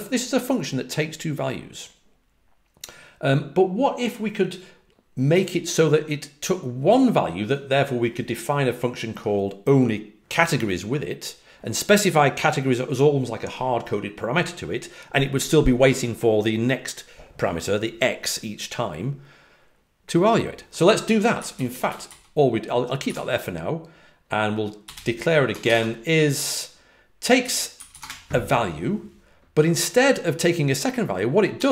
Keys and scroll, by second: 21.1-22.0 typing, 23.0 typing, 24.6-25.7 typing, 27.1-28.4 typing, 31.5 typing.